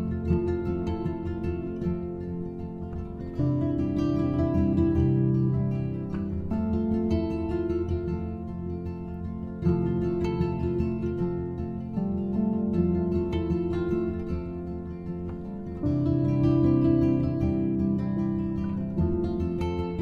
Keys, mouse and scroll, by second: 3.6-6.6 drag, 7.7-10.8 drag, 12.0 click, 14.0 click, 15.7-20.0 drag.